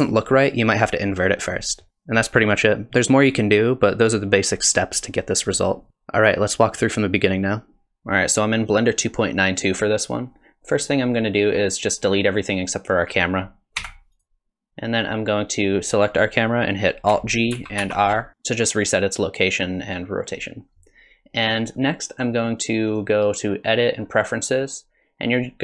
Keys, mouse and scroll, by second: 10.0 click, 11.1 click, 13.8 x, 14.8 click, 17.5 alt+g, 17.8 alt+r, 21.5 click, 22.9 click.